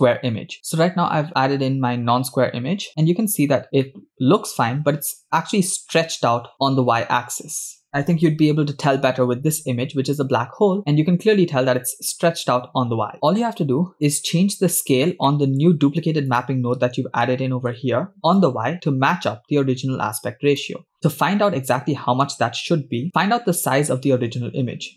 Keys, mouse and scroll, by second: 0.9-1.2 scroll down 3, 1.4 scroll up 4, 2.3-2.8 scroll up 4, 4.1 shift+middle click, 4.9 scroll down 1, 6.5 shift+middle click, 13.8 scroll up 4, 14.0 middle click, 15.1 scroll down 2, 15.3-15.7 middle drag, 16.3 click, 17.2 middle click, 18.4-20.7 shift+drag, 21.1-22.3 scroll down 7, 21.8 shift+middle click.